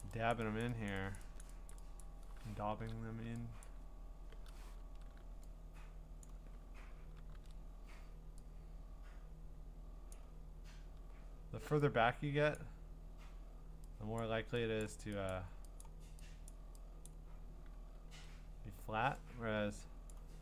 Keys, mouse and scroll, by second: 0.0 click, 0.3 click, 0.6 click, 0.9 click, 1.2 click, 1.4 click, 1.7 click, 2.0 click, 2.7 %, 3.6 click, 6.2 click, 6.4 click, 7.3 ctrl+z, 10.1 click, 12.6 click, 14.2 click, 14.8 click, 15.3 click, 15.8 click, 16.5 click, 17.1 click, 18.1 ctrl+z, 20.1 click.